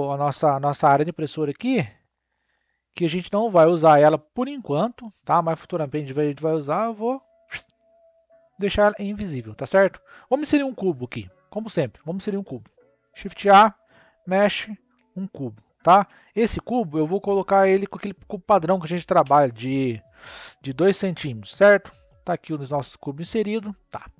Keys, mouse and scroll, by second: 0.2-7.5 shift+middle drag, 7.5 click, 9.6-10.6 scroll up 3, 10.6-13.0 middle drag, 13.0 shift+a, 16.4-19.5 drag, 21.4-22.3 shift+middle drag, 23.4-24.1 middle drag.